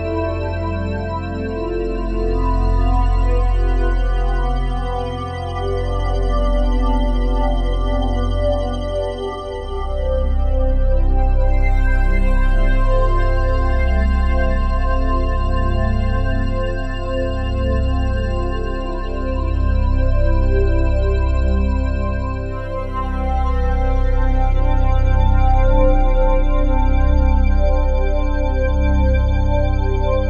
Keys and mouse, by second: 9.3-12.4 ctrl+alt+drag, 12.4 g, 13.0 Escape, 14.0-15.0 typing, 17.2 click, 19.7 typing, 21.1 click, 23.1-26.5 typing, 26.5 click, 27.6 click, 28.3 click, 28.9-30.0 drag.